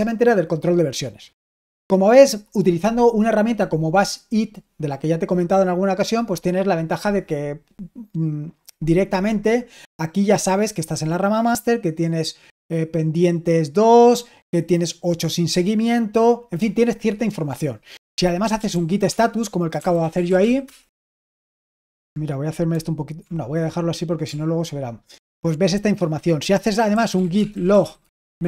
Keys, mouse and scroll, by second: 11.1-12.2 drag, 18.1-21.1 typing, 22.4-23.2 typing, 26.6-28.4 typing.